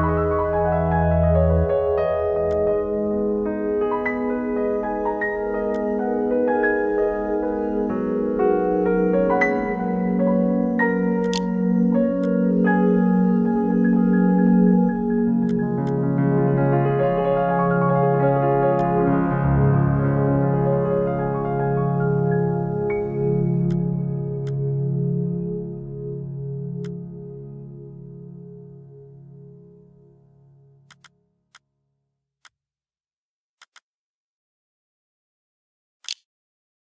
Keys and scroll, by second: 10.4-11.2 typing, 11.2 ctrl+e, 35.2-36.1 typing.